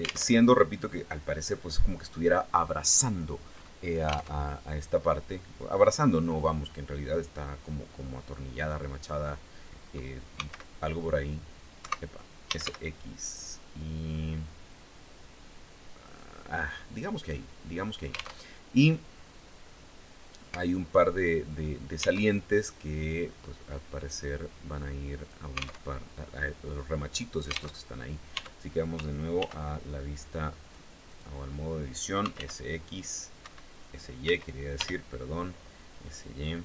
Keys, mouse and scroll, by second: 3.9 alt+Tab, 4.7-9.2 middle drag, 9.2-9.6 scroll up 2, 9.9 s, 11.4 Escape, 12.2 x, 15.6 click, 16.0-17.7 drag, 18.0 alt+Tab, 21.8 alt+Tab, 23.2-25.0 drag, 25.4 alt+Tab, 27.4 alt+Tab, 27.9 Tab, 29.0 ctrl+r, 29.5 ctrl+scroll up 1, 30.2 click, 30.6 click, 31.5-32.5 typing, 33.0 Escape, 33.8 s, 34.3 y.